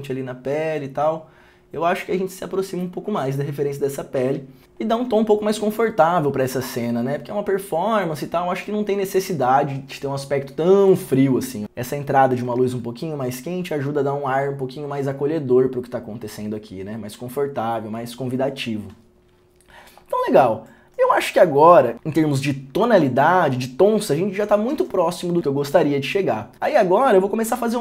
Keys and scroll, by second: 11.6 ctrl+d, 12.7 ctrl+d.